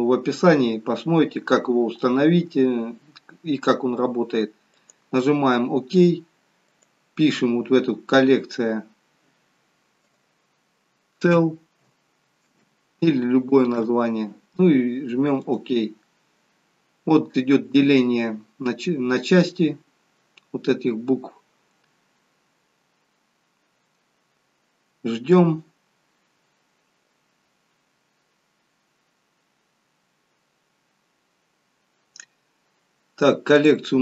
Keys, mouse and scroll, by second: 12.6 l, 33.5 click.